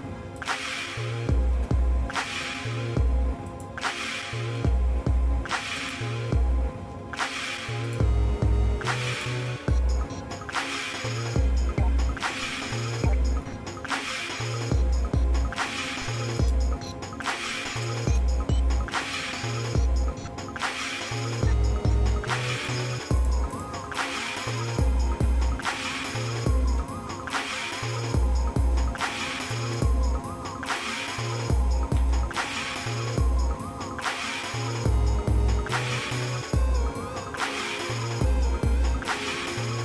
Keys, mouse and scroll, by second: 0.4 click, 1.0 shift+middle click, 1.8 scroll down 1, 1.8 scroll up 1, 2.0 scroll down 2, 2.3 middle click, 3.5 shift+click, 4.5 x, 6.5 shift+middle click, 7.2 ctrl+Tab, 8.2 shift+middle click, 9.1 alt+shift+click, 10.6 f, 11.1 middle click, 11.6-12.2 scroll down 4, 12.3 middle click, 12.9 middle click, 13.4 shift+middle click, 14.1-14.6 scroll down 2, 14.9-15.2 scroll up 2, 15.3 middle click, 16.3 click, 17.2 alt+shift+click, 17.9 click, 19.1 f, 19.8 shift+middle click, 20.4 shift+middle click, 20.7 shift+middle click, 21.6 ctrl+Tab, 23.1 click, 23.5 shift+click, 25.1 j, 25.6 middle click, 26.2 shift+middle click, 26.9 scroll down 1, 27.2 middle click, 27.8 middle click, 28.4-29.1 scroll up 3, 29.4 click, 30.7 click, 31.9 j, 32.9 middle click, 39.3 scroll down 1.